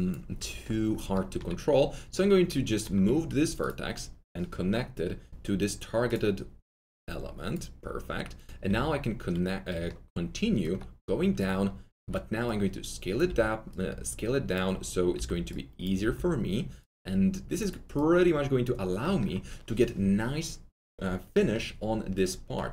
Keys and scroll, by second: 3.0 alt+1, 8.6 2, 11.9 r, 13.2 w, 15.1 r, 16.0 w.